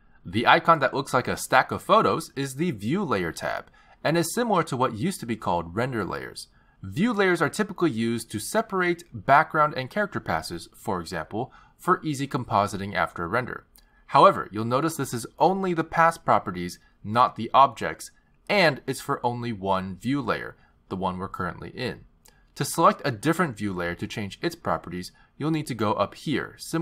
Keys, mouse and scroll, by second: 2.9 click, 8.7 click, 9.3 click, 16.7 click, 16.9 click, 17.9 click, 18.2 click.